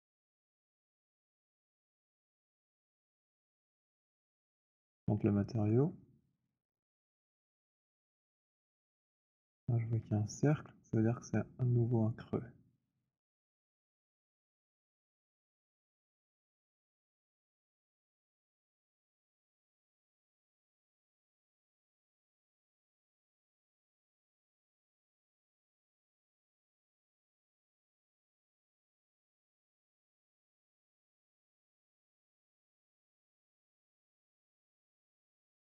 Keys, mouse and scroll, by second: 2.1 click, 2.3 click, 5.6 right click, 6.4 click, 9.0 alt+click, 11.7 alt+click, 14.9 alt+click, 14.9 alt+middle click, 15.3-16.2 scroll, 16.6 click, 19.1 click, 20.1 alt+middle click, 21.7 click, 23.3 click, 23.3 right click, 26.3 click, 27.2 click, 30.5 click, 31.9 click.